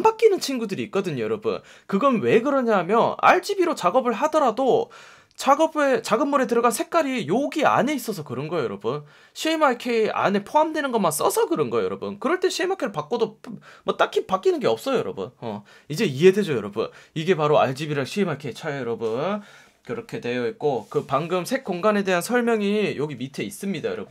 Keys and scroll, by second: 5.4 F1, 11.4 F1.